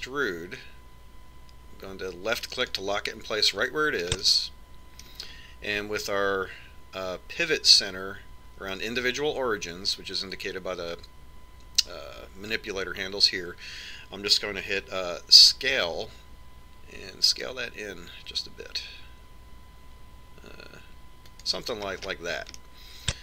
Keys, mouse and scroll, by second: 1.4 e, 5.9-7.6 middle drag, 17.4 s.